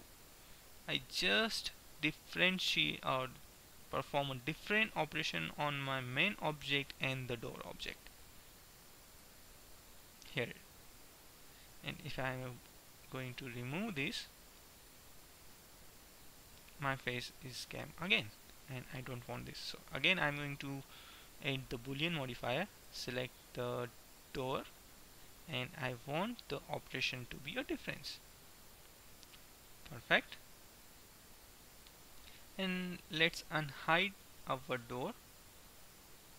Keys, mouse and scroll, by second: 3.4-4.4 middle drag, 9.4-11.3 right drag, 12.3-13.9 drag, 15.6-17.4 drag, 17.4-18.6 middle drag, 20.4-21.9 drag, 22.9-24.8 drag, 26.8-28.8 drag, 28.8-30.4 middle drag, 33.9 alt+h, 34.8 middle click.